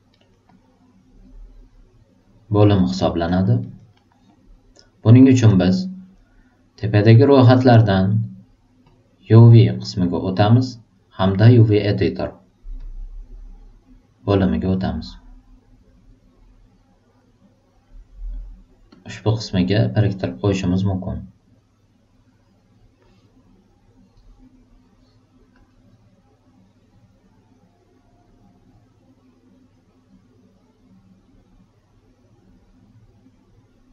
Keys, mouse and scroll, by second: 0.1 alt+right click, 0.4-2.6 alt+drag, 2.8 alt+super+right click, 3.2 alt+super+middle click, 3.6 alt+super+right click, 3.9 alt+super+middle click, 4.3 alt+super+click, 8.9 super+click, 12.8 click, 14.9-17.8 drag, 18.9-20.0 drag, 21.8-22.9 drag, 25.5 click, 28.7 click, 29.7-32.6 drag.